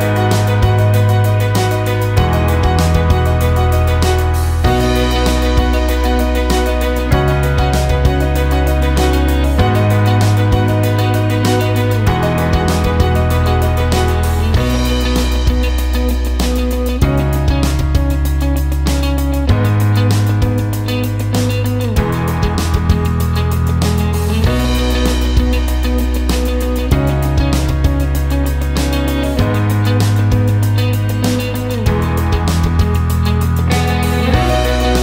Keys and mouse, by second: 0.0 KP_7, 1.6 g, 5.7 ctrl+KP_1, 7.0 click, 8.1 KP_7, 8.8 g, 13.3 ctrl+KP_1, 14.6 click, 15.7 KP_7, 16.6 g, 20.8 ctrl+KP_1, 22.1 click, 23.1 KP_7, 23.9 g, 28.3 ctrl+KP_1, 29.6 click, 30.6 KP_7, 31.4 g.